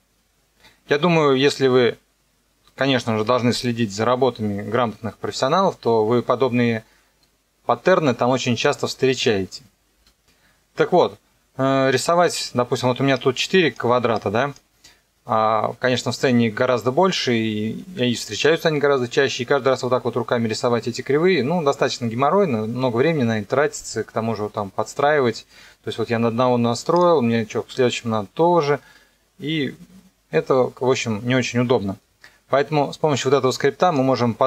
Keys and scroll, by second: 9.9 space.